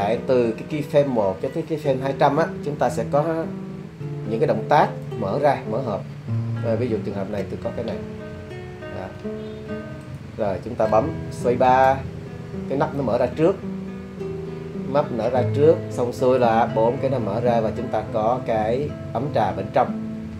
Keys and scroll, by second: 11.7 space.